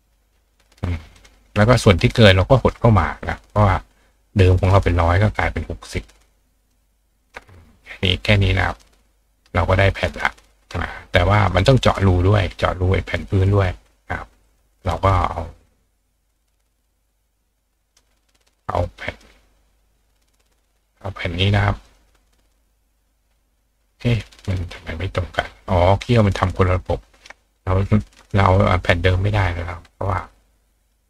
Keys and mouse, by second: 0.6-1.2 drag, 1.2-1.6 drag, 1.7 click, 2.8-3.2 drag, 3.6-4.7 drag, 6.7-7.2 ctrl+drag, 7.3-8.7 drag, 8.8 click, 10.0-11.5 ctrl+drag, 11.6-14.4 drag, 14.6-17.8 drag, 18.0-19.1 drag, 19.2-21.8 drag, 21.9-22.5 drag, 26.7-31.0 ctrl+drag.